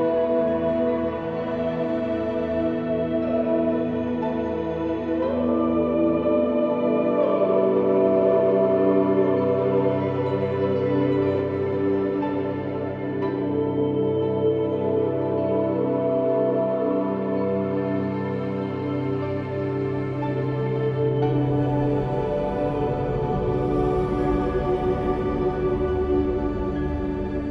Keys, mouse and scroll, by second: 1.6 s, 4.3 ctrl+r, 5.0 ctrl+r, 5.6 ctrl+r, 6.2 ctrl+z, 6.4 ctrl+r, 7.5 ctrl+r, 8.2 ctrl+r, 9.2-10.3 middle drag, 10.3 ctrl+z, 11.1 ctrl+KP_Add, 11.6 s, 13.3 ctrl+r, 14.1 ctrl+r, 15.1 ctrl+r, 15.6 ctrl+r, 17.2 ctrl+r, 17.9 ctrl+r, 18.2 ctrl+r, 19.9 ctrl+r, 20.6 middle click, 21.2-22.7 drag, 21.7 middle click, 22.8 e, 24.1 ctrl+r, 24.7 ctrl+r, 25.3 ctrl+r, 25.8 ctrl+r, 26.8 middle click.